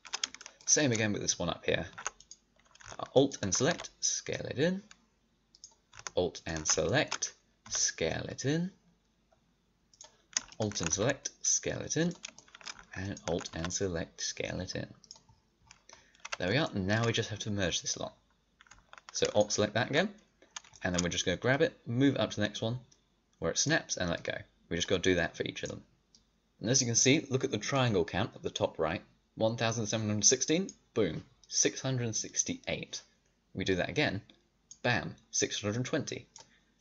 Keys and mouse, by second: 3.6 s, 7.5 s, 10.8 s, 13.4 s, 15.3 middle click, 16.2 a, 20.4-21.4 right drag, 21.4-22.7 middle drag, 22.7 click, 24.1-26.2 drag.